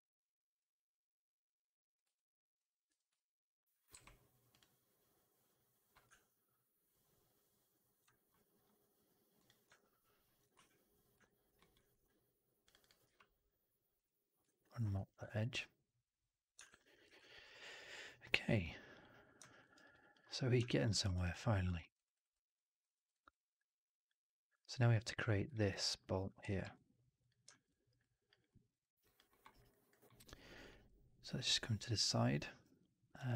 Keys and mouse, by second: 2.0 alt+click, 2.8 4, 3.0-3.5 drag, 3.8 q, 9.6-10.3 alt+drag, 10.3 right click, 11.1 alt+right click, 11.5 alt+middle click, 11.6 alt+right click, 12.7-14.3 drag, 14.4 alt+right click, 14.6 alt+click, 14.9 4, 15.1 alt+right click, 15.3 alt+right drag, 15.4-16.4 alt+drag, 16.5 shift+x, 16.9 shift+x, 17.1 alt+drag, 17.4 alt+right drag, 17.5 alt+right drag, 17.7 alt+drag, 18.4-19.3 drag, 19.5 alt+right drag, 19.7 alt+right drag, 20.8 alt+middle drag, 21.0 alt+right drag, 21.2-21.5 alt+drag, 21.7 alt+middle drag, 21.8 alt+right drag, 22.0 alt+right click, 22.2-22.7 alt+drag, 22.8 alt+middle drag, 23.0 alt+right drag, 23.2 alt+click, 25.5 alt+middle drag, 25.6 alt+right drag, 25.8-26.2 alt+drag, 26.5 ctrl+s, 27.4 alt+middle drag, 27.6 alt+right drag, 27.9 alt+drag, 28.4 middle drag, 28.6 right drag, 28.8 right drag, 28.9 drag, 29.2 middle drag, 29.4 right drag, 29.6 alt+drag, 29.9 alt+middle drag, 30.1 alt+right drag, 30.4 alt+click, 30.6 alt+middle drag, 31.8-32.5 alt+middle drag, 33.1-33.3 drag.